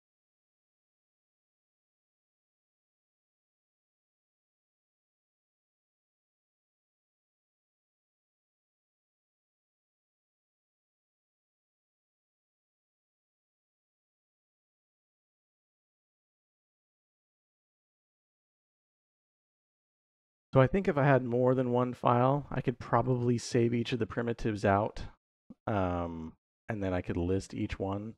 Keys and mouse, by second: 22.9 click.